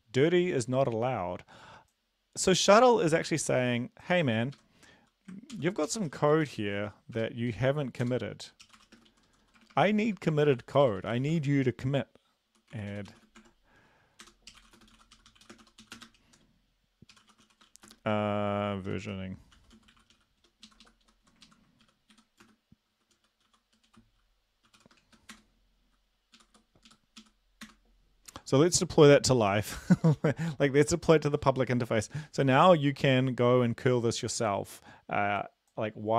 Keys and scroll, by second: 4.6 Right, 5.5 ctrl+l, 5.9-7.6 typing, 8.0 Return, 8.7-11.3 typing, 12.7-13.4 typing, 14.2 Return, 14.5-20.1 typing, 20.6 Left, 20.8 Left, 21.0 Right, 21.3 Right, 21.4 ctrl+Left, 21.8-25.0 typing, 22.1 End, 25.3 Return, 26.3 Up, 26.5 Up, 26.9 Up, 27.2 Up, 27.6 Return.